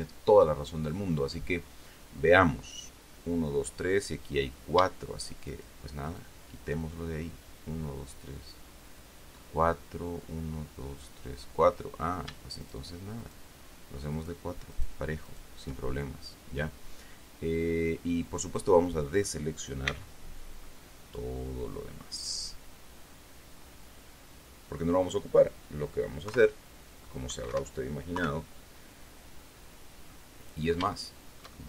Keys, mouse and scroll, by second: 5.8 shift+right click, 6.4 shift+right click, 12.9 shift+right click, 13.5 shift+right click, 14.5 shift+right click, 15.1 shift+right click, 15.6 shift+right click, 17.5-19.8 drag, 20.2 c, 21.0-25.3 drag, 26.6 KP_3, 27.8 Escape, 28.5 KP_3, 30.4 click, 31.3-31.6 shift+middle drag.